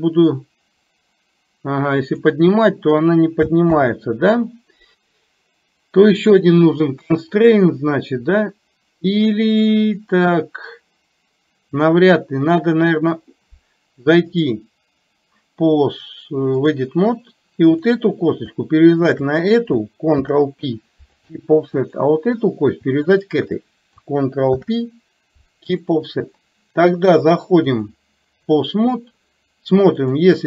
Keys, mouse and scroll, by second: 14.3-16.9 drag, 19.2 shift+click, 21.8 click, 23.2 click, 27.7-28.8 drag, 30.0 click.